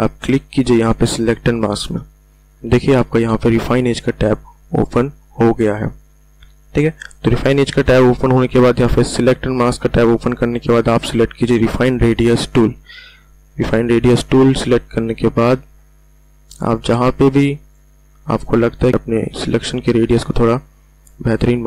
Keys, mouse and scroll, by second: 1.4 shift+click, 8.0-11.7 drag, 16.0-18.9 drag, 19.3-21.6 drag.